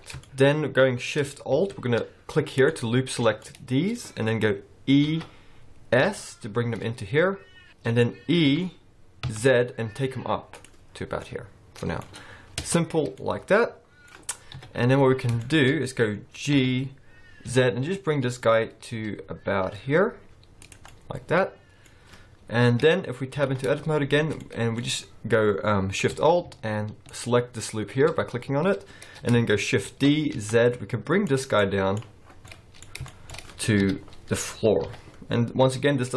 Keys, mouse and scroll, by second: 0.2 shift+middle click, 0.6-1.1 scroll up 1, 2.6 alt+shift+click, 3.4 middle click, 5.0 e, 7.7 middle click, 7.7-8.4 scroll down 4, 8.4 e, 10.9-11.4 scroll down 6, 11.2 middle click, 12.0-12.6 scroll up 1, 12.6 Tab, 12.6-13.1 scroll up 3, 13.1 middle click, 14.5 KP_1, 15.2 scroll down 5, 15.4 shift+middle click, 15.7-16.2 scroll up 3, 16.5 g, 20.9 middle click, 22.0-22.6 scroll up 1, 22.6 KP_1, 23.3 Tab, 23.5-24.4 scroll up 4, 24.4 middle click, 27.1 alt+shift+click, 28.9-29.3 scroll down 1, 29.8 shift+d, 31.5 middle click, 32.2-32.8 scroll down 4, 32.4 middle click, 32.8 scroll up 1, 33.1 shift+middle click, 33.8 KP_1, 34.6 scroll up 3, 34.8 g.